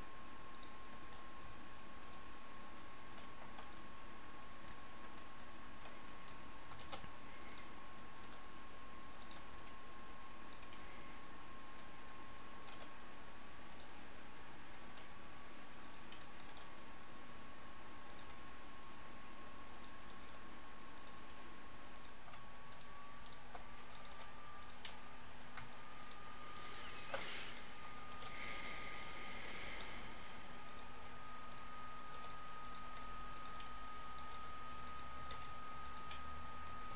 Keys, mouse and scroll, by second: 1.4 s, 6.8 shift+d, 8.2 r, 9.6 g, 12.8 r, 14.9 g, 16.6 r, 18.4 g, 20.3 r, 21.4 g, 24.2 g, 28.2 shift+d, 29.1 r, 29.9 g, 31.0 g, 32.2 r, 33.0 g, 34.4 r, 35.2 s.